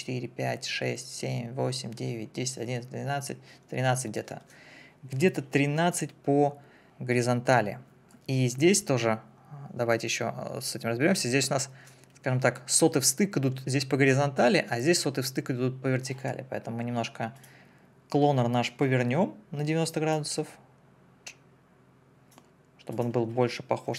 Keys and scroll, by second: 23.8 9.